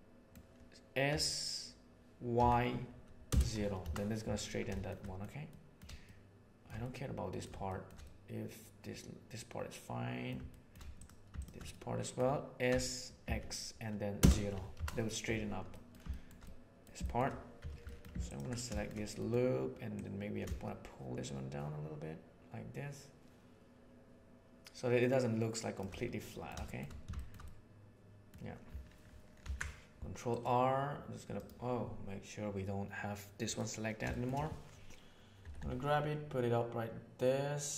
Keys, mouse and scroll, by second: 1.0 s, 4.6 shift+middle click, 5.4 middle click, 6.0 shift+middle click, 6.7 middle click, 7.6 shift+middle click, 8.0-10.2 middle drag, 10.5 shift+middle click, 11.6 middle click, 12.6 s, 15.7 middle click, 16.0 shift+middle click, 16.4 middle click, 16.9 shift+middle click, 17.5 2, 17.8 middle click, 18.2 alt+click, 18.6 shift+middle click, 19.1 middle click, 19.8 click, 20.6-24.3 shift+middle drag, 24.3-25.7 shift+right drag, 26.2 shift+middle click, 27.1 shift+middle click, 27.4 middle click, 29.4 ctrl+r, 33.4 right click, 34.0 shift+middle click, 35.3 g.